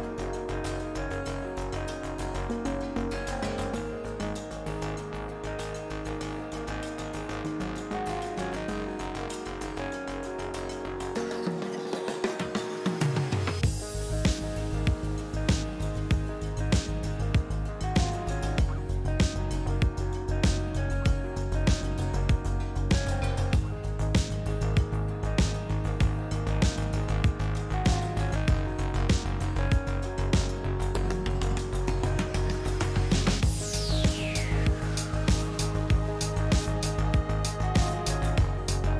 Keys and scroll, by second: 3.1 F3, 3.6 5, 3.7 F4, 8.3 ctrl+z, 8.4 ctrl+z, 10.3 ctrl+z, 19.8 F3, 37.0 s, 37.5 s, 38.0 s, 38.5 s.